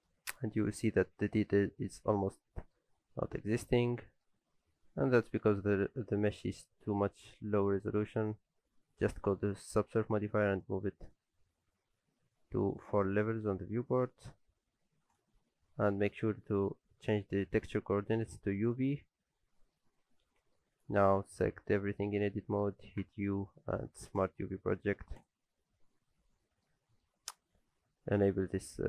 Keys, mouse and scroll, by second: 0.2-0.5 scroll up 4, 0.5 middle click, 1.0 z, 1.4 shift+middle click, 1.7-2.1 scroll up 2, 2.0 z, 2.2-2.9 scroll down 2, 2.4 middle click, 2.9-3.5 scroll down 2, 3.1 middle click, 3.5-4.6 scroll up 2, 3.7 middle click, 6.4 click, 19.7 middle click, 20.7 Tab, 20.9-21.4 scroll down 3, 21.1 middle click, 21.4 a, 21.8 shift+middle click, 22.4 middle click, 23.0 u, 26.0-26.7 scroll up 4, 26.4 middle click, 26.8 shift+middle click.